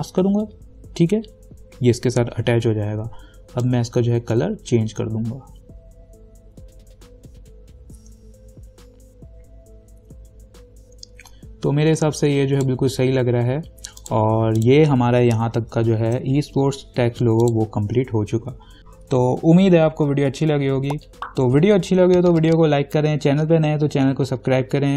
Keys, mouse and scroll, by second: 3.8-13.8 drag, 14.2 click, 15.8 ctrl+=, 17.6 click, 18.8 Caps_Lock.